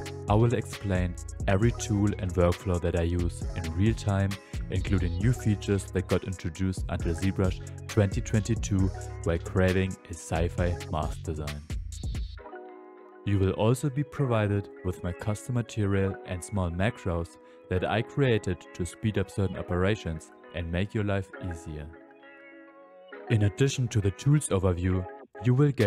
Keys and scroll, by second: 0.0-1.1 typing, 4.7 s, 8.9 ctrl+z, 9.5 space, 10.2 space, 10.4 space, 11.9-12.9 typing, 15.6 space, 16.1 shift+f, 18.7 s, 19.7 s, 21.1-23.4 typing.